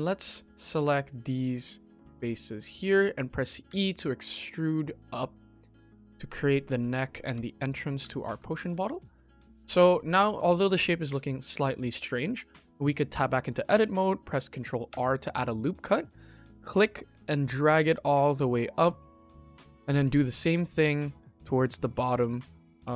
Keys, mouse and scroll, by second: 0.6-1.7 drag, 2.1 middle click, 2.7 KP_1, 3.6 e, 6.3 scroll down 1, 6.6 shift+middle click, 7.1 g, 7.9 Tab, 8.3 shift+middle drag, 8.9-9.2 middle drag, 9.3 middle click, 9.4 KP_1, 9.8 shift+middle click, 9.9 shift+middle click, 10.2-10.6 middle drag, 11.5 shift+middle drag, 12.1 KP_1, 12.6 Tab, 13.4 click, 13.9 shift+middle click, 14.8 ctrl+r, 19.8 ctrl+r.